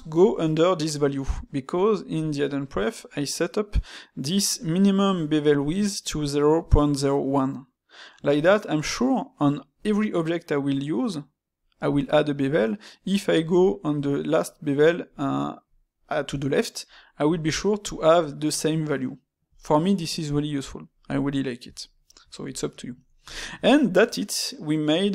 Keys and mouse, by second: 20.8-25.1 middle drag.